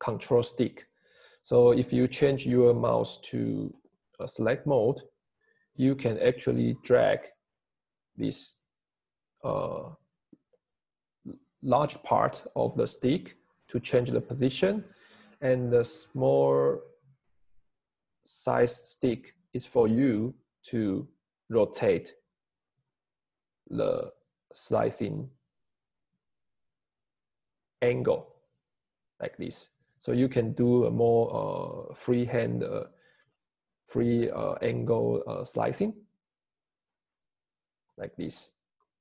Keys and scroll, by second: 3.9 Escape, 32.5 Escape, 35.5 Escape.